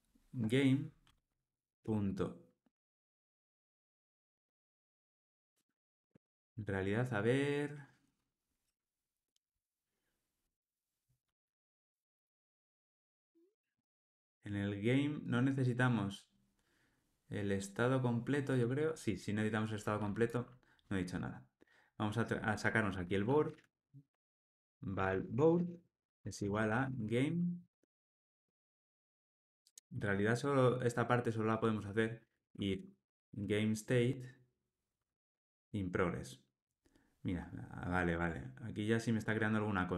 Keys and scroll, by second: 4.7 ctrl+space, 10.4 Escape, 27.5 Return, 38.1 Tab.